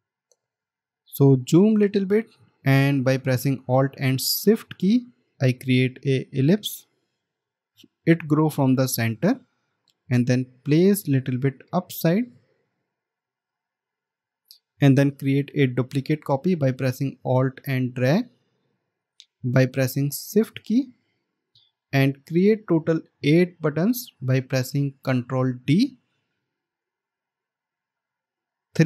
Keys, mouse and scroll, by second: 0.9 alt+scroll up 1, 6.1 alt+shift+click, 17.5 alt+click, 22.0 alt+scroll down 1, 23.2 space.